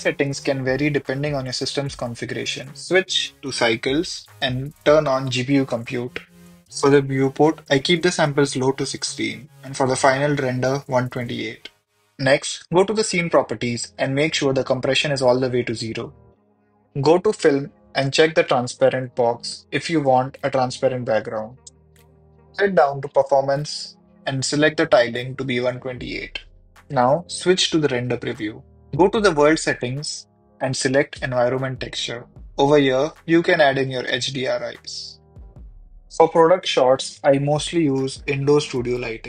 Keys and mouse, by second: 2.6-3.4 drag, 4.3-5.0 drag, 6.3 click, 8.8 click, 11.5 click, 15.5-15.9 drag, 18.3 click, 19.5 click, 20.3 click, 21.5 click, 22.7-24.2 drag, 26.8 click, 27.7 click, 29.2-31.7 drag, 36.2 click.